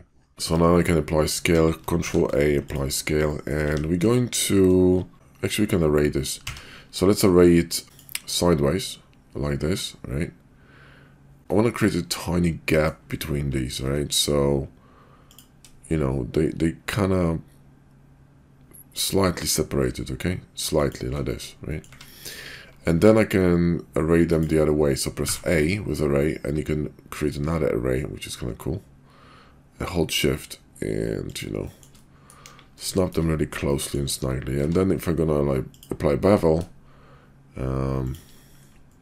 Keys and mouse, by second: 0.5-1.4 middle drag, 1.5 KP_5, 1.9 ctrl+a, 3.3 middle drag, 3.6 `, 4.0 KP_5, 6.3 q, 12.2 click, 12.3-12.9 middle drag, 13.7 q, 21.7 click, 21.7 right click, 22.9 q, 31.6 shift+click, 32.0 middle click, 32.5 KP_5, 33.1 shift+middle click, 33.6-34.0 shift+middle drag, 34.4 q.